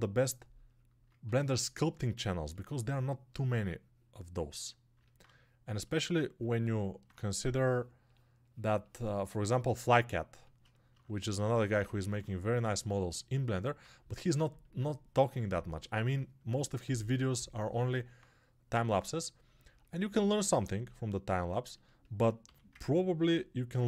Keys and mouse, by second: 22.9-23.8 alt+right drag.